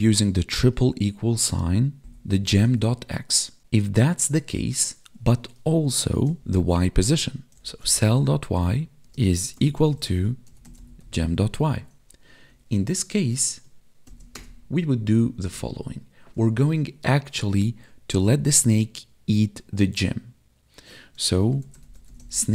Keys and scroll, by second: 0.4 space, 6.1 space, 9.0 space, 9.9 space, 12.5 Right.